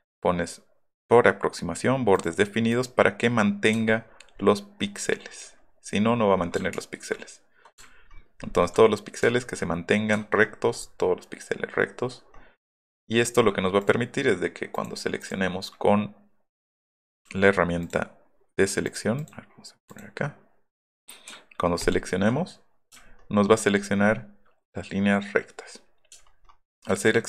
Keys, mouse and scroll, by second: 2.1 click, 2.7 click, 3.8 alt+scroll up 2, 4.1 alt+scroll down 2, 4.4 alt+scroll up 2, 4.6 alt+scroll down 2, 4.8-5.3 alt+scroll up 3, 5.2 alt+middle click, 5.6 alt+middle click, 5.6 alt+scroll down 1, 6.1-6.4 alt+scroll up 4, 6.7 ctrl+z, 7.0 ctrl+z, 7.7 scroll up 2, 9.3 alt+scroll up 2, 10.1-10.5 alt+scroll down 4, 10.5 alt+middle click, 10.8 alt+middle click, 12.1 alt+middle click, 12.2-13.0 scroll down 4, 15.2 click, 16.8-17.3 drag, 21.8 ctrl+click, 22.9-23.3 scroll up 5, 26.2 alt+middle click, 26.2-26.5 alt+scroll down 4, 26.4 alt+middle click.